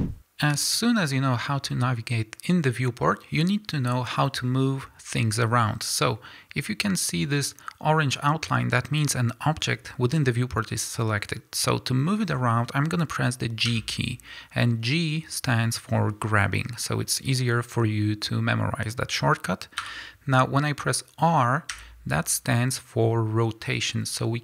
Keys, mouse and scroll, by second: 0.4 click, 13.7 g, 19.9 Escape, 21.7 r.